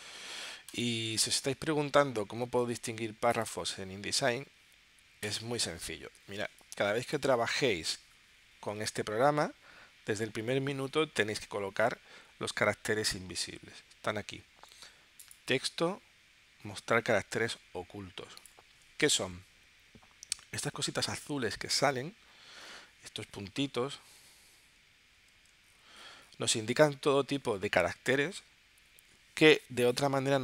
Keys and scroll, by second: 6.4 space.